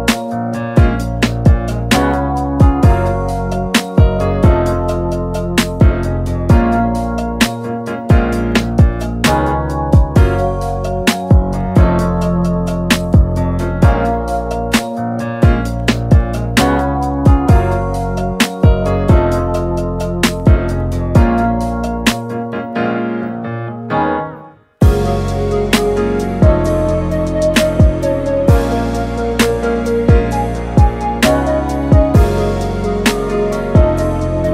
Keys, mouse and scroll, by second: 0.7-1.8 middle drag, 1.8-3.7 drag, 3.7-6.0 middle drag, 6.0 click, 6.7 Tab, 7.2 a, 8.7 ., 10.0 r, 13.3 click, 14.1 click, 15.5 shift+s, 18.1 a, 19.4 click, 20.0 middle click, 20.8 r, 33.6-34.5 middle drag.